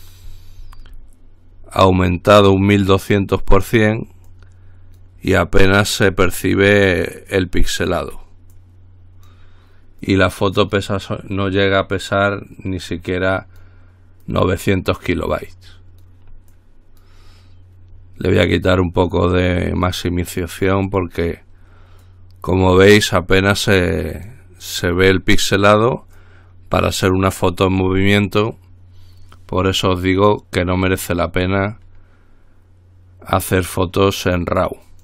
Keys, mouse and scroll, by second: 0.2-1.8 scroll down 2, 2.2-3.3 drag, 3.4-4.4 drag, 4.5-5.7 drag, 6.4 click, 7.6-8.7 drag, 8.8-10.0 drag, 10.3-11.5 drag, 11.7-12.9 drag, 13.1-14.3 drag, 14.4-15.7 drag, 16.7 click, 19.3-21.7 drag, 22.3-23.8 drag, 23.9-25.0 drag, 25.1-26.4 drag, 30.4-30.9 scroll down 1, 31.1-31.8 scroll up 1.